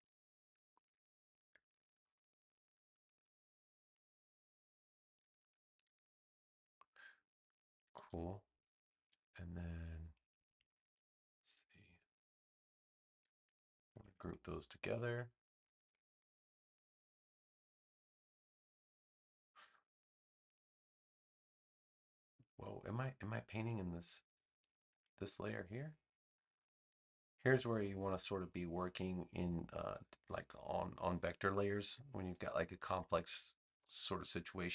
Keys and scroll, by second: 14.8 super+g.